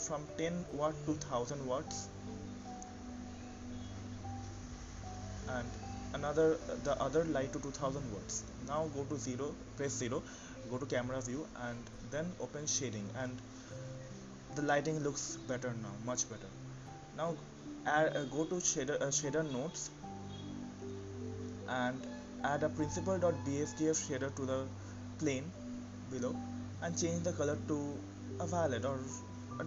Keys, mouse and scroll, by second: 1.1 click, 2.3 click, 5.4 KP_0, 7.2 KP_0, 8.7 click, 10.7 click, 15.5-16.6 drag, 26.3-27.3 scroll up 7, 27.3 click, 27.9-28.4 scroll up 2, 28.4 shift+middle click.